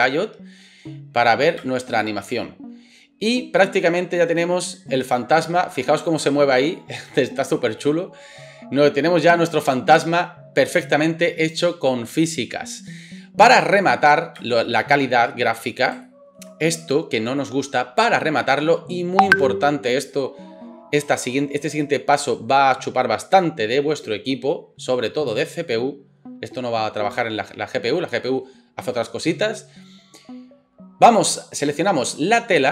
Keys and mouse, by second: 0.0 click, 0.0-25.3 middle drag, 1.6 space, 14.4 space, 25.3-32.7 drag.